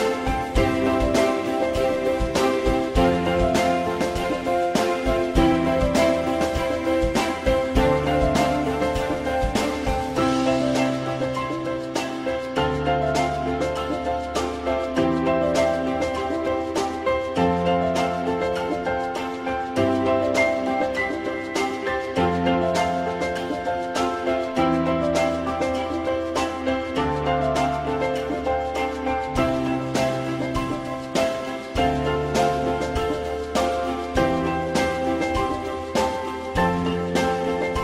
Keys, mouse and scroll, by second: 7.3 click, 16.3-17.4 drag, 21.2 click, 23.7 click, 24.4 ctrl+z, 26.6 click, 28.1 click, 30.9 click.